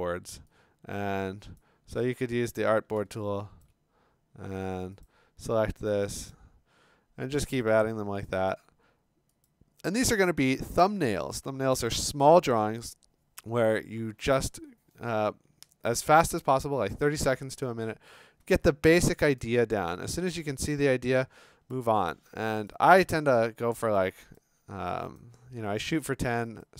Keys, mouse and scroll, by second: 0.0 click, 1.6 click, 2.5-3.0 scroll, 3.7 click, 5.0 click, 6.3 click, 7.7 click, 8.5 click, 9.4 click, 10.3 scroll, 19.2 click, 19.7 click, 19.9 click, 20.2 click, 20.2 click, 20.3-20.6 click, 20.4 click, 20.4 click, 20.7 click, 20.8 click, 21.0-21.7 click, 21.2 click, 21.2 click, 21.3 click, 21.7 click, 21.8 click, 21.9 click, 22.0 click, 22.0 click, 22.2 click, 22.2 click, 22.2 click, 22.4 click, 22.4 click, 22.5 click, 22.6 click, 22.7 click, 23.5 click, 24.0-24.9 click, 24.4 click, 25.2 shift+click, 26.6 click.